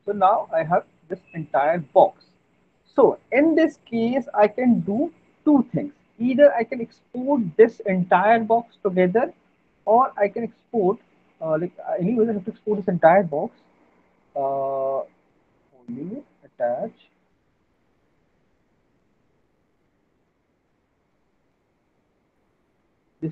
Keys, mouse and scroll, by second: 0.0 alt+middle click, 1.3 click, 2.5 alt+middle click, 9.9 middle click, 10.3 alt+middle click, 10.5 middle click, 10.8 middle click, 11.1 alt+middle click, 11.7 click, 14.0 click, 14.6 right click, 15.7 click, 15.7 right click, 16.5 click, 18.3 click, 19.0 middle click, 19.2 middle click, 19.8 click, 20.2 click, 20.8 click, 21.8 click, 22.9 click.